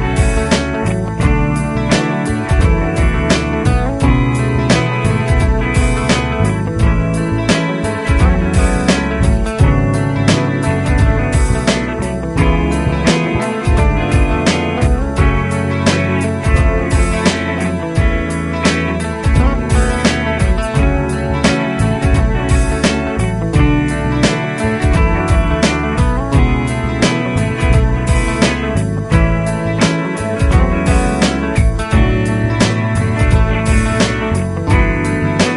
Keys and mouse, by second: 20.6 Up.